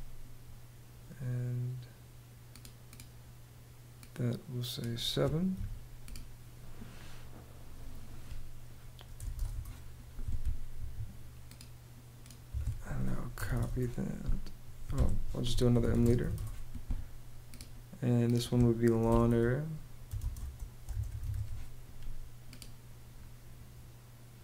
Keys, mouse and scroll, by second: 5.1 7, 8.5-9.4 typing, 10.3 Escape, 12.0 Escape, 12.7-13.6 typing, 14.5 Escape, 14.8-16.3 typing, 18.6-21.4 typing.